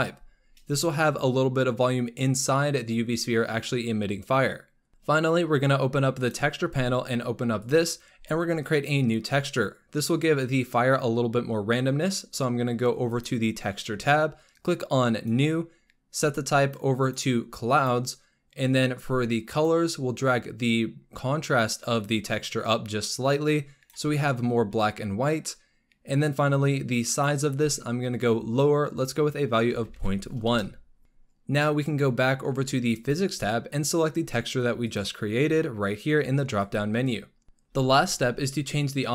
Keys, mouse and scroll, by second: 4.9-5.4 scroll down 8, 6.1 click, 6.5-7.5 scroll down 5, 7.5 drag, 7.8-8.5 scroll down 9, 13.0 click, 15.0-16.6 drag, 16.9-20.1 drag, 20.1-20.6 scroll down 4, 22.0-30.1 drag, 32.8 click, 34.7-37.4 drag.